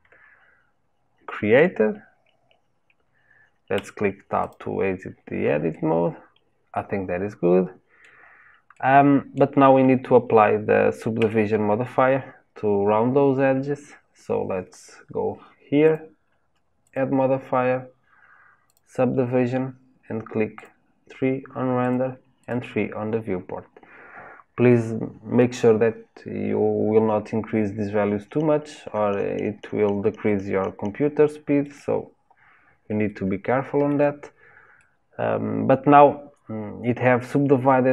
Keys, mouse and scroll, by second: 3.7 Tab, 4.4 click, 5.7-11.1 middle drag, 11.1 Tab, 15.8 click, 16.8-19.8 drag, 20.5 click, 21.8-22.8 drag, 30.2-32.3 shift+middle drag, 32.3-33.1 scroll up 1, 33.1-37.9 shift+middle drag.